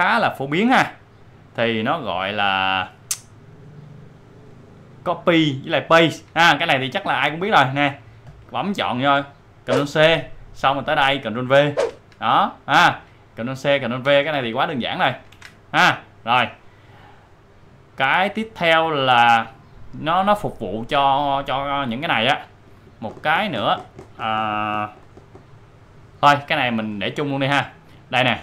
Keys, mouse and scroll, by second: 2.3-8.2 drag, 9.7 ctrl+c, 10.6 click, 11.8 ctrl+v, 13.5 click, 14.0 ctrl+c, 14.8 click, 15.3 ctrl+v, 17.3 ctrl+v, 17.6-20.4 drag, 21.8 click.